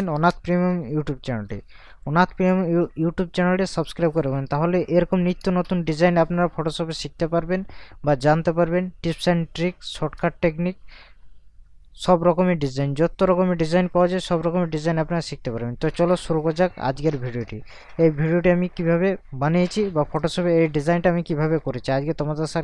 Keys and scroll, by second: 3.8 ctrl+KP_Add, 5.4 ctrl+KP_Subtract, 10.2 ctrl+KP_Subtract.